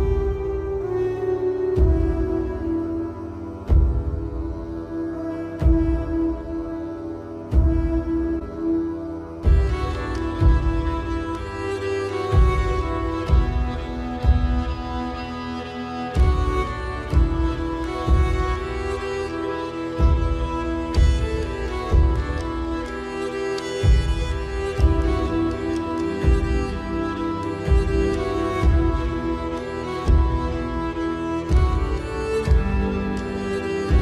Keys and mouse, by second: 1.0 shift+a, 5.4 Tab, 6.3 KP_1, 8.0 s, 13.2 KP_7, 14.2 shift+middle click, 15.4 shift+f, 17.0 click, 19.7 click, 21.8 ctrl+f, 23.8 middle click, 25.8 middle click, 27.0 middle click, 28.0 KP_7, 28.8 z, 30.7 click.